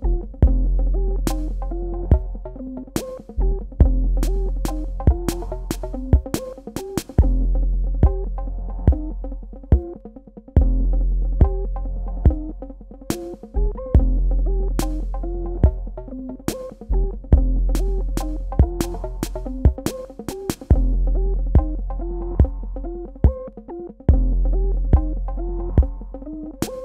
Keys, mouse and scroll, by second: 0.6 click, 3.3 space, 3.5 click, 3.9 space, 4.4 click, 8.3 KP_Add, 10.5 KP_Subtract, 11.5 click, 15.8 KP_9, 16.0 KP_0, 21.5 Tab, 21.8 click.